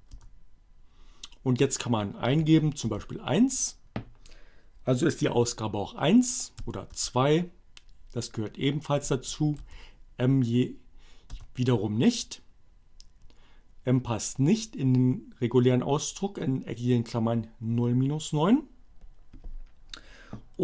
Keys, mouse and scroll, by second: 1.1 1, 3.0 Return, 5.9 2, 6.0 Return, 8.6 m, 11.0 Return.